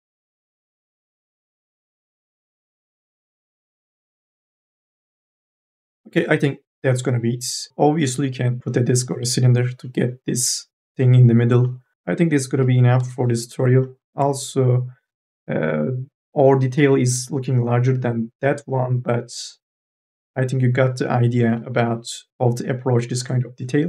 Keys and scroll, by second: 1.2 q, 12.4 4, 12.8 e.